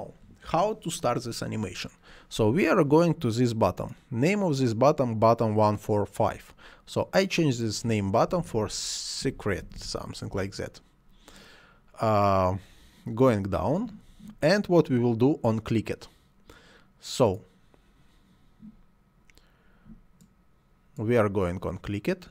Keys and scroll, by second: 8.3-10.3 typing, 10.4 Return.